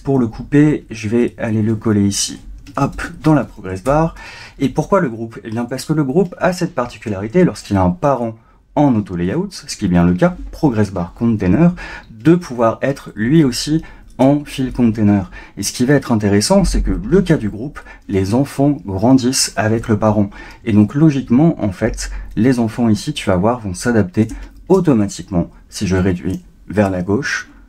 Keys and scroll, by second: 2.9 super+v.